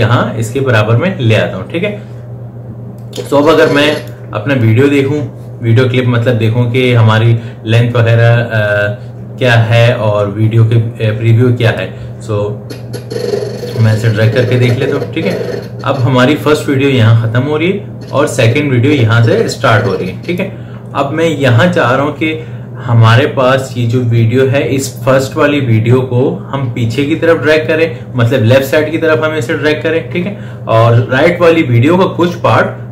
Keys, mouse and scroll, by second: 3.3-6.9 drag, 12.1-22.1 drag.